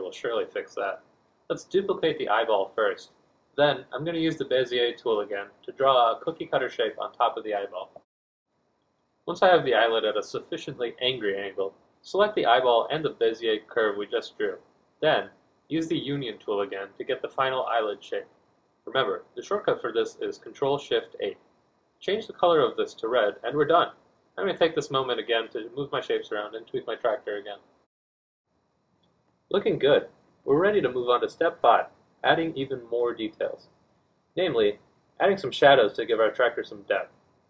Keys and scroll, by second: 0.0 Escape, 1.4 F1, 2.7 d, 8.7 F1, 18.1 z, 22.1 4, 25.5 F2, 26.5 F1.